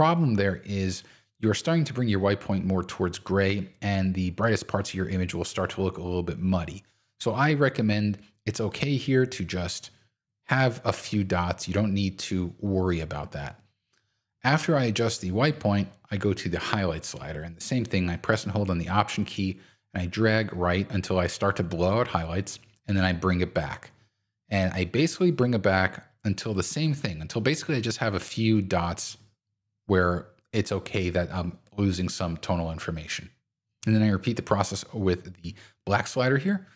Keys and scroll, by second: 7.8 super+z.